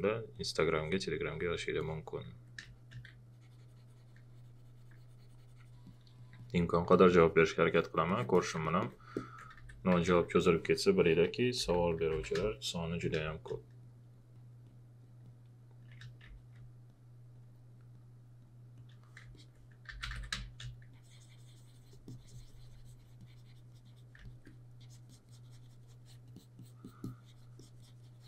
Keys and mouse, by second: 2.6 space, 2.7 click, 5.8 alt+click, 8.1 alt+click, 9.4 alt+click, 9.6-10.1 typing, 11.6-12.6 typing, 13.2 click, 15.9 space, 16.3 click, 19.2 click, 19.3 alt+click, 19.7-20.6 typing, 20.4 click, 24.2 alt+click.